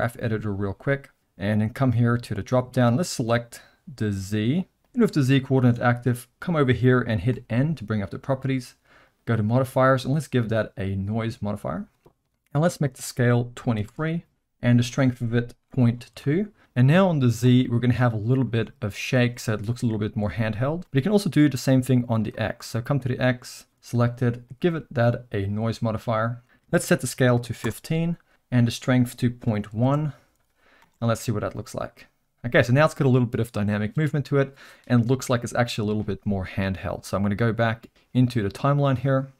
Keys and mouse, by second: 2.1 click, 4.8 click, 7.3 n, 9.0 click, 10.1-11.5 drag, 12.7-14.4 drag, 14.9-16.6 drag, 17.4 space, 20.8 space, 22.0 click, 24.5-25.6 drag, 26.4-28.3 drag, 28.7-30.3 drag, 30.8 space, 38.9 click.